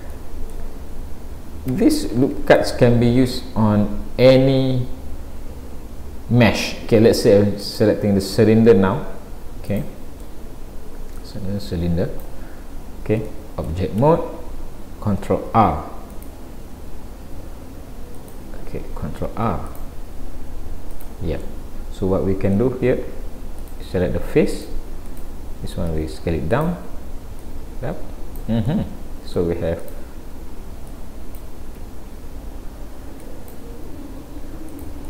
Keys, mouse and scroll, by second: 0.2 middle click, 1.8 Tab, 2.6 shift+a, 9.7 middle click, 11.2 click, 12.6-13.3 scroll up 3, 13.3 shift+middle click, 14.0 Tab, 14.7 scroll up 1, 15.5 ctrl+r, 19.3 ctrl+r, 21.5 middle click, 23.6 click, 24.5 click, 25.1 click, 25.9 s, 27.4 click, 28.7 middle click, 29.8 click, 30.9 click, 31.8 s, 33.8 s.